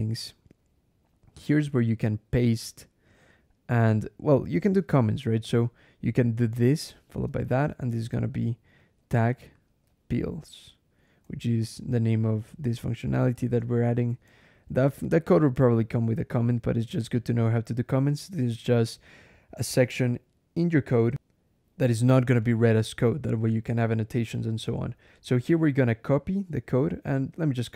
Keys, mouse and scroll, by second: 1.7 click, 2.1 Return, 3.6 click, 5.2 /, 6.6-10.9 typing, 13.2 shift+8, 14.3 shift+/, 14.8 shift+BackSpace, 15.1 /, 16.0 shift+Return, 18.0 click, 19.2 click, 21.1 alt+\, 22.2 click, 23.8 Return, 27.4 2.